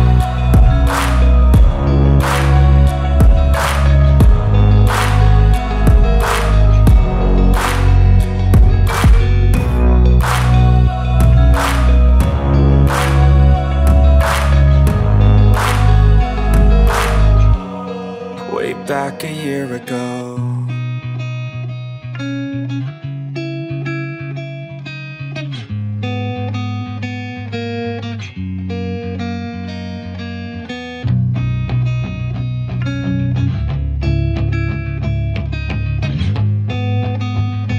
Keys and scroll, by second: 1.4 Up, 2.1 space, 2.5 e, 4.7 space, 5.1 p, 7.3 space, 7.8 l, 10.9 space, 11.2 p, 13.0 Return, 13.5 space, 15.7 m, 16.9-17.9 typing, 18.1 Return, 19.2 1, 19.8 Return, 20.2 space, 21.1 m, 22.7 Return, 24.6 Return, 25.3 e, 28.5 space, 28.7 Escape, 30.8 p.